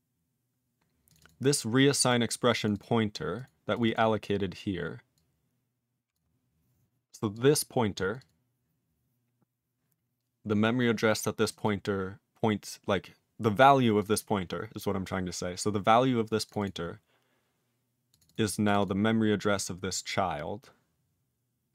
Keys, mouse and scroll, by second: 1.1 click, 1.1 click, 1.2 double click, 1.2 double click, 1.9 click, 1.9 click, 2.0 double click, 2.1 double click, 2.6 click, 2.6 click, 2.7 double click, 2.8 double click, 3.3 click, 3.4 click, 3.7 click, 3.8 click, 3.8 double click, 3.9 double click, 5.1 click, 6.1 click, 7.3 click, 8.1 click, 8.2 click, 8.2 click, 11.4 click, 11.5 click, 11.5 double click, 11.6 double click, 14.0 click, 14.0 click, 14.1 double click, 14.1 double click, 16.4 click, 16.5 click, 16.6 double click, 16.6 double click, 18.1 click, 18.2 click, 18.2 double click, 18.3 double click, 18.6 click, 18.7 click, 18.8 double click, 18.8 double click.